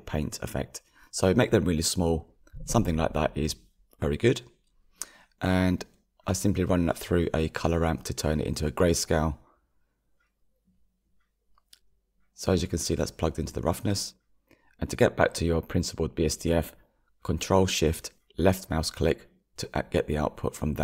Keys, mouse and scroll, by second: 0.2-0.6 scroll up 7, 5.1-6.7 scroll down 8, 6.7-15.4 shift+middle drag, 15.4-19.2 drag.